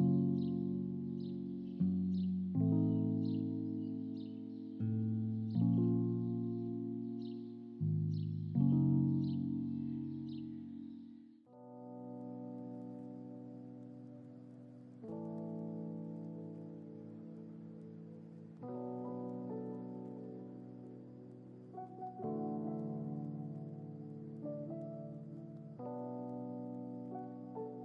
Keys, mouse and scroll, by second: 1.9 click, 3.9 click, 4.9 click, 6.4 click, 8.2 click, 9.0-15.5 drag, 23.2 space, 24.9 ctrl+z, 25.3 ctrl+z, 25.5 ctrl+z, 25.7 ctrl+z.